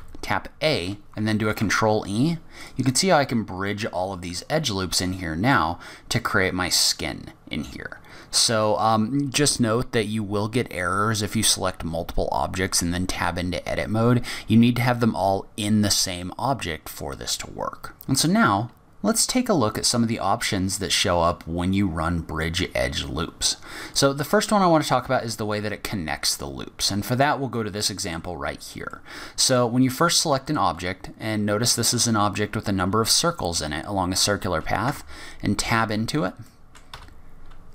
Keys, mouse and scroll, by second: 1.4 ctrl+e, 3.7 middle click, 23.9 click, 24.7-26.5 scroll down 10, 24.9 Tab, 26.5 scroll down 2, 27.5 middle click, 28.4-29.0 scroll up 2, 28.9 middle click, 30.4 click, 33.1 middle click, 34.3-34.8 scroll down 2, 34.8 Tab, 36.4 middle click, 36.9 a.